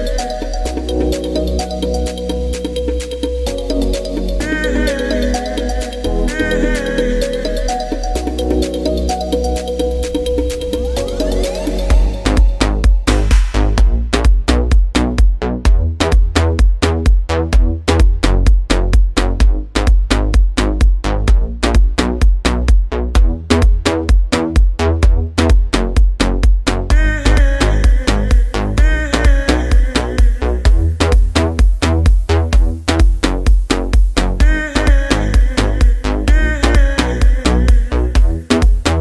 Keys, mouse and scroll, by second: 5.0-12.5 drag, 17.3 click, 20.0 click, 22.4 click, 26.0 alt+shift+z, 26.5 middle click, 29.2-34.4 drag, 35.0 click, 35.1 shift+d, 36.7 alt+d.